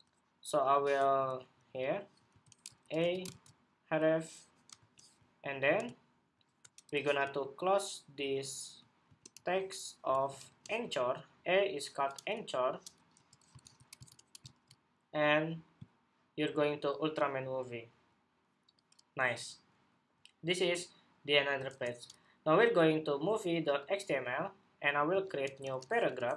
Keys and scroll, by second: 3.0 super+v, 13.3 super+s, 13.9 super+Tab, 14.2 super+r, 21.4 super+Tab.